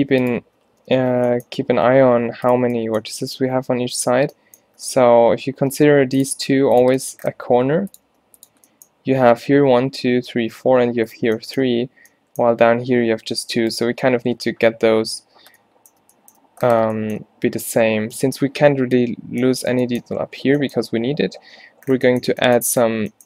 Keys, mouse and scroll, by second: 0.8 ctrl+z, 1.0 ctrl+z, 1.9 g, 5.8 r, 6.4 s, 7.6 g, 8.1 r.